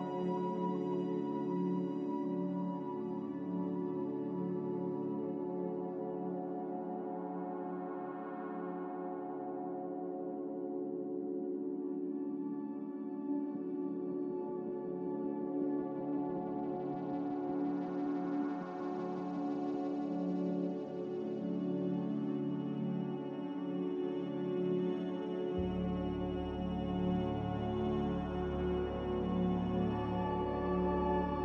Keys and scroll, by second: 4.3 z, 16.2 ctrl+z, 22.8 shift+Escape.